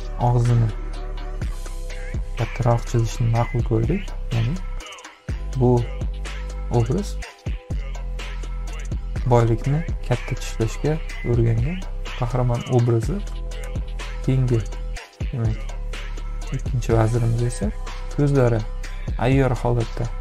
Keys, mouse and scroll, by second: 2.0 ctrl+=, 2.9 space, 2.9 click, 18.0 space, 18.2 click.